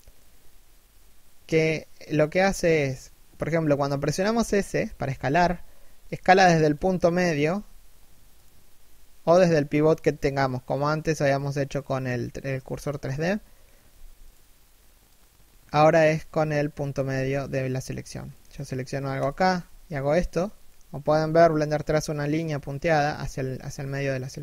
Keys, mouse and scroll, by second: 4.8 s, 6.5 middle click, 7.1 s, 12.1 KP_3, 12.6 KP_1, 13.4 s, 16.6 s, 18.0-18.6 scroll down 1, 18.8 shift+right click, 19.2 s.